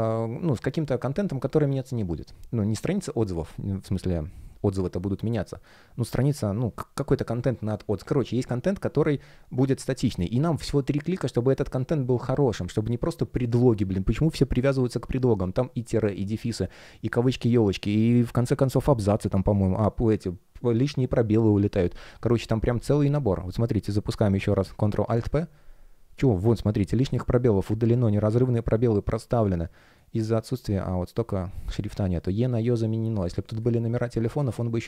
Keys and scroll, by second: 24.9 alt+super+3, 33.3 space.